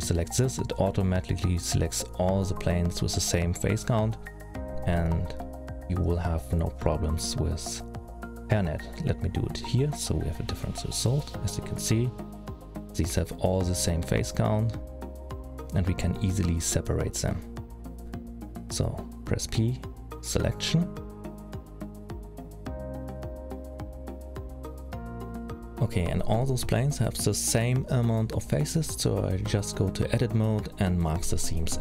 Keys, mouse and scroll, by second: 5.9 middle click, 7.9 alt+a, 8.9 l, 10.1 F3, 11.9 middle click, 13.6 middle click, 15.6 middle click, 19.0 p, 25.5 click, 26.2 middle click, 27.6 click, 28.6-30.0 scroll up 4, 29.1 middle click, 30.0-30.8 scroll up 4, 30.8 middle click.